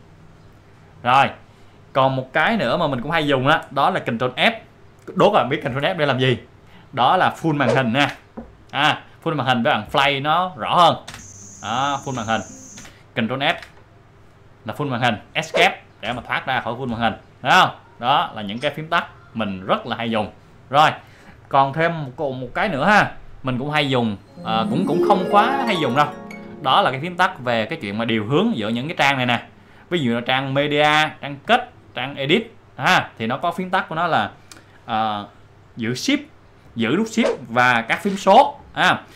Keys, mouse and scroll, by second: 7.7 click, 8.0 ctrl+f, 11.1 space, 12.8 space, 13.5 ctrl+f, 30.6 click, 31.4 click, 32.5 click, 33.4 click.